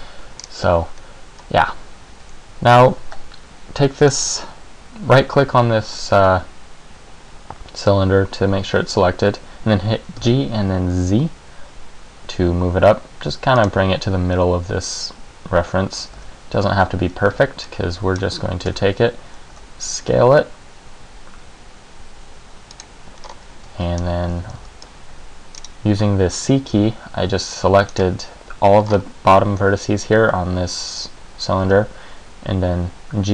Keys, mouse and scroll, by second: 0.6-2.2 scroll down 1, 2.2 scroll down 1, 2.3 g, 4.2 right click, 10.3 g, 13.8 click, 15.8 Tab, 16.3 z, 17.0 a, 17.5 b, 18.8 Tab, 19.6 s, 23.0 click, 23.4-24.0 scroll up 2, 23.8 Tab, 24.1-24.4 scroll down 1, 24.4 a, 24.7 c, 25.7 click, 26.8 c, 28.1 right click, 29.1 scroll up 3, 31.8 g.